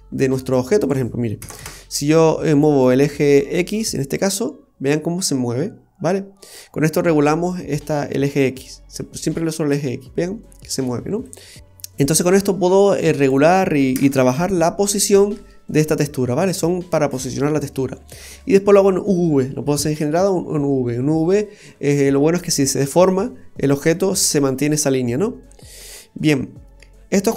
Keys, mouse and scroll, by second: 0.8 click, 4.2 click, 9.7 click, 13.2 click, 17.8-18.1 scroll down 2, 18.1 middle click, 25.3 scroll down 2, 25.7 middle click.